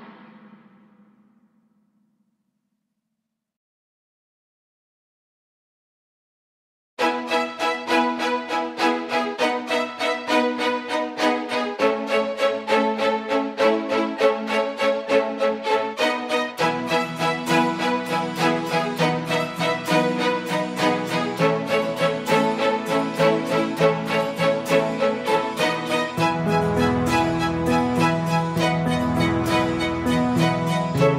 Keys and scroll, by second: 10.9 Escape, 13.8 Escape, 16.6 F5, 29.3 Escape.